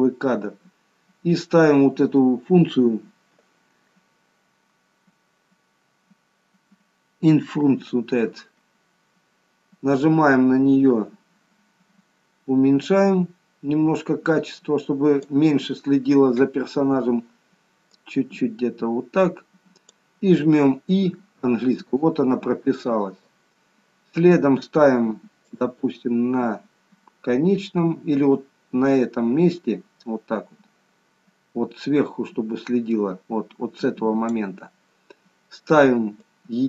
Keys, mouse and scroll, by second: 12.8 click, 17.9 click, 21.4 i, 25.5 click, 36.1 click.